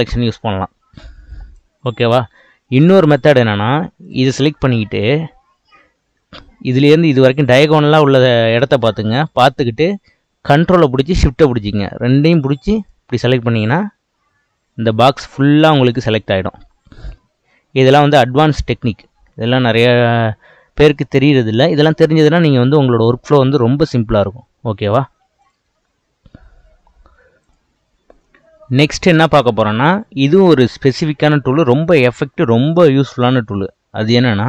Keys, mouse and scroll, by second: 2.7 click, 4.0 click, 12.8 ctrl+shift+click, 25.4 click.